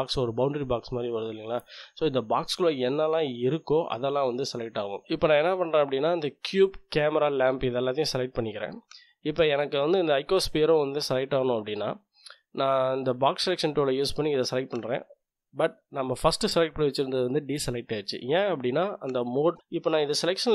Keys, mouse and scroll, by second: 5.2 click, 6.1-9.2 drag, 12.1-15.2 drag, 19.6 click, 20.0-20.5 drag.